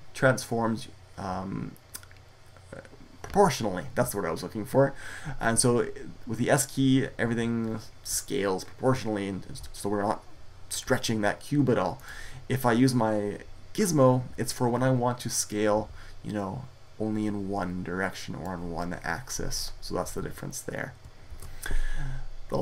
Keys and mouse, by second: 11.9-14.4 drag, 15.3-17.7 drag, 21.1 ctrl+z.